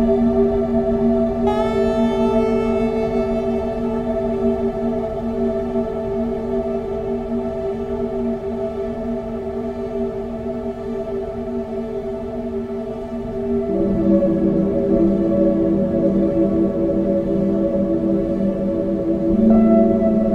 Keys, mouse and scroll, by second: 0.4 shift+d, 3.2 shift+d, 6.8 click, 8.4 click, 8.8 click, 12.5 click, 16.2 click, 16.5-17.4 scroll down 16, 17.4 scroll up 7, 17.9 scroll down 1, 18.2 scroll down 1, 18.6 shift+middle click, 18.9 scroll up 10, 19.2 shift+middle click, 19.7 click.